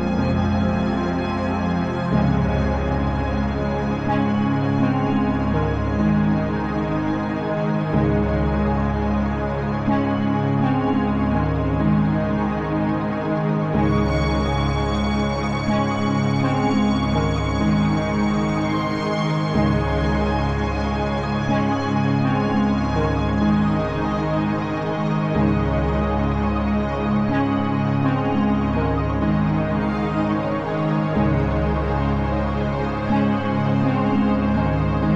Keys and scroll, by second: 6.9 BackSpace.